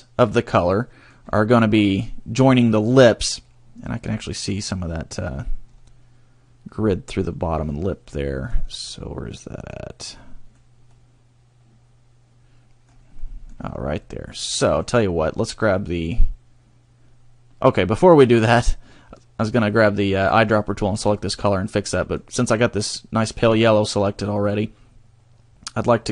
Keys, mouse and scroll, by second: 0.7 middle click, 1.3 scroll up 1, 3.3 middle click, 4.0 scroll up 2, 4.7 scroll down 1, 7.4 middle click, 8.6 scroll down 1, 8.9 middle click, 10.0 middle click, 10.9 middle click, 13.2 middle click, 13.6-14.0 scroll up 2, 14.0 middle click, 14.6 middle click, 17.9 middle click, 18.6 middle click, 21.8 middle click, 23.3 middle click, 24.4 middle click.